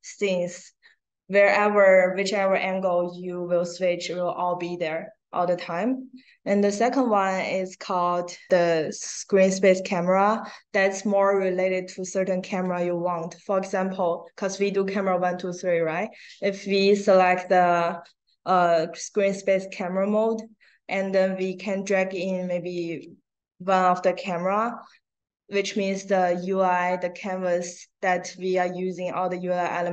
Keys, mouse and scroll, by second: 17.2 click, 22.1-23.5 drag.